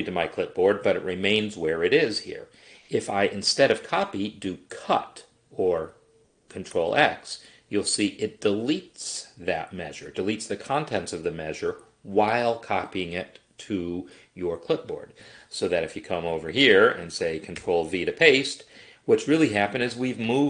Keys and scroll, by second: 5.9 ctrl+x, 17.7 ctrl+v.